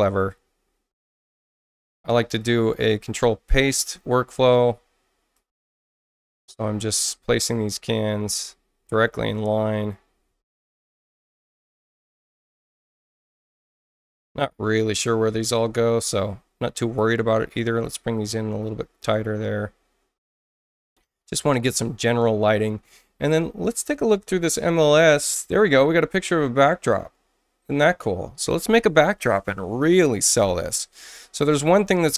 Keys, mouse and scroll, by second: 1.1 click, 1.7 ctrl+alt+c, 2.4-3.6 drag, 4.5 ctrl+alt+c, 5.3-7.6 drag, 8.2 ctrl+alt+c, 9.3-10.6 drag, 11.0 ctrl+alt+c, 11.5 click, 12.8 ctrl+alt+c, 13.3-15.0 drag, 16.0 click, 17.8-19.0 drag, 20.1 click, 23.3 scroll down 2, 23.8-25.0 scroll up 8, 25.2-25.8 scroll down 4, 26.2-26.6 scroll up 4, 27.3 middle click, 27.3 scroll up 2, 27.7 scroll down 2.